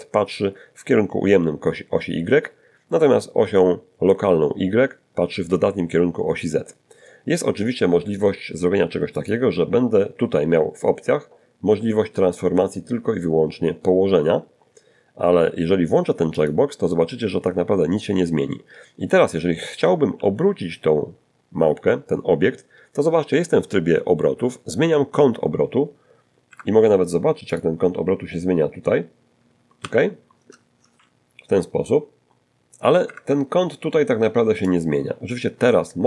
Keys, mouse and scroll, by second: 7.4 click, 14.6 click, 18.3 r, 24.7 Escape, 25.7 click, 26.5-27.3 scroll up 1, 27.3-27.7 scroll down 1, 27.9 shift+middle click, 29.1 shift+r, 31.3 Escape, 32.9-36.0 drag.